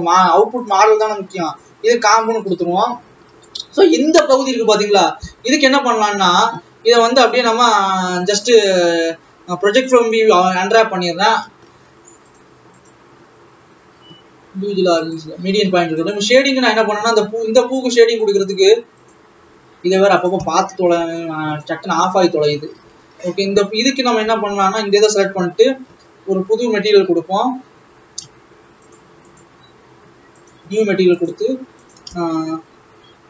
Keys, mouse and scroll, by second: 0.0 click, 1.8-3.1 drag, 3.1 alt+a, 3.8 l, 5.3 KP_7, 5.8-6.3 scroll down 1, 6.3-6.7 scroll up 2, 6.7-7.5 scroll down 1, 9.9 u, 15.1-16.4 drag, 17.1 scroll down 3, 17.6-18.1 scroll up 4, 18.6 click, 20.1-22.1 drag, 22.1-22.8 scroll up 8, 22.8 ctrl+s, 23.0 alt+a, 23.4-24.1 scroll down 7, 25.1 l, 29.1 click, 32.0-33.2 drag.